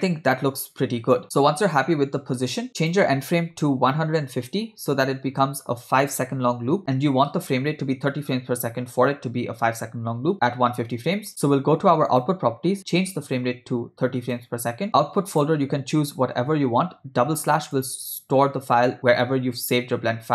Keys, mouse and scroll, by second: 2.8-5.5 drag, 12.1 click, 13.1-14.6 drag, 15.4-17.9 drag, 16.3 /.